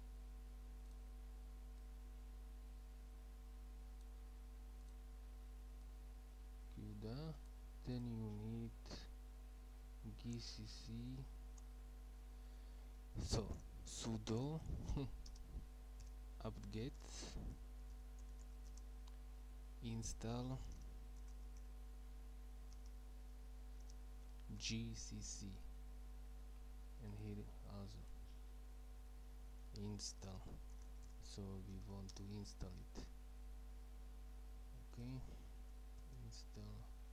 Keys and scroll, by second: 8.9 Up, 13.6-19.0 typing, 20.4-22.9 typing, 24.4-25.6 typing, 28.9 Left, 29.5-31.9 typing, 36.0 Right, 36.9 typing.